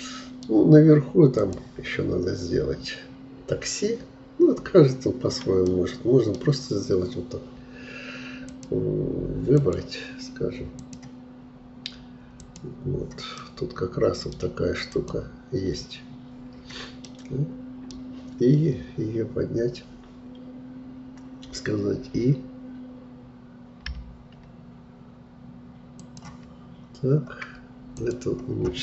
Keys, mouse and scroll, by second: 1.4-4.4 drag, 5.7-8.5 middle drag, 8.5-13.4 drag, 13.4-15.0 middle drag, 15.0-17.1 drag, 17.1-20.0 middle drag, 26.7-28.0 scroll up 3, 28.0-28.8 drag.